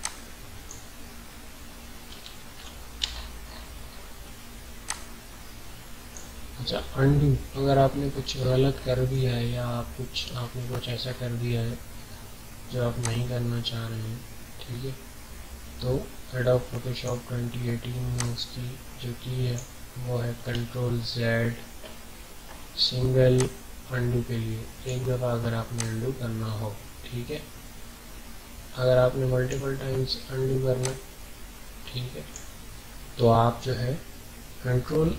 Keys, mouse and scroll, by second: 2.4 ctrl+z, 3.0 alt+scroll up 1, 3.6 alt+scroll up 1, 4.1 alt+scroll up 1, 4.8-6.9 drag, 6.9 alt+scroll down 1, 7.7 ctrl+scroll up 1, 10.3 alt+scroll up 1, 10.9-12.7 ctrl+scroll up 4, 13.0 click, 13.0-20.7 drag, 20.6 alt+scroll down 1, 23.3-34.7 drag.